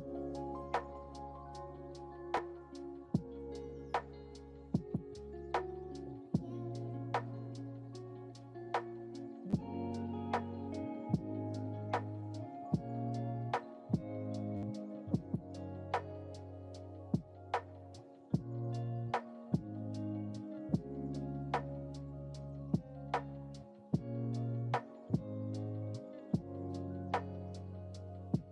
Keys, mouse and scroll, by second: 3.7 click, 5.0 click, 6.5 click, 10.2-11.9 drag, 12.7 KP_0, 15.9-16.9 drag, 18.3 click, 20.2 ctrl+z, 22.5 click, 23.3 click, 24.1 click, 26.5 click, 27.4-28.5 drag.